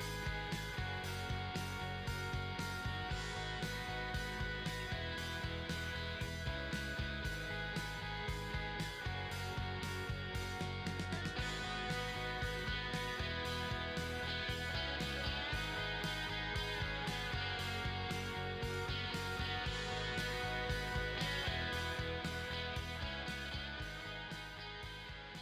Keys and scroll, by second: 0.2 ctrl+-, 0.3 ctrl+=, 0.7 ctrl+-, 1.1 \, 1.6 ctrl+=, 1.8 ctrl+shift+x, 2.0 ctrl+=, 2.4 ], 2.8 \, 3.4 ], 4.5 ctrl+z, 5.3 ctrl+v, 5.5 ctrl+t, 5.6 Return, 6.1-8.6 typing, 8.2 ctrl+-, 8.8 ctrl+j, 9.3 ctrl+-.